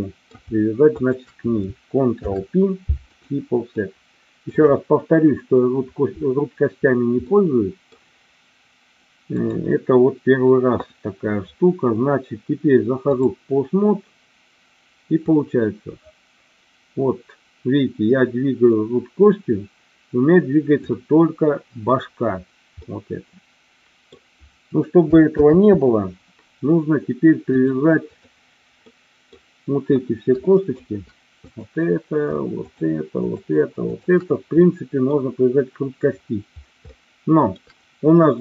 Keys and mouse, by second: 0.9 shift+click, 2.1 ctrl+p, 3.8 middle click, 7.4 middle click, 9.4-13.2 drag, 15.2-21.0 drag, 22.8-24.2 middle drag, 25.4 ctrl+z, 27.6 click, 28.8 middle click, 30.3 shift+middle click, 31.3 click, 33.8 shift+click, 34.7 middle click, 36.9 shift+middle click.